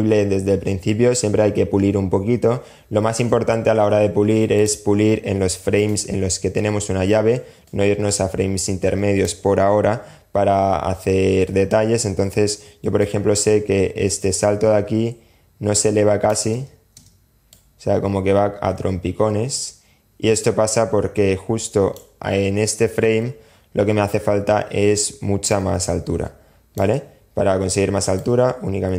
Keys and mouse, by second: 2.4 space, 3.7 click, 5.0 click, 6.8-8.4 drag, 12.2-15.6 drag, 15.7 space, 16.6 space, 16.7-21.2 drag, 24.7-26.0 drag, 27.4-28.6 drag.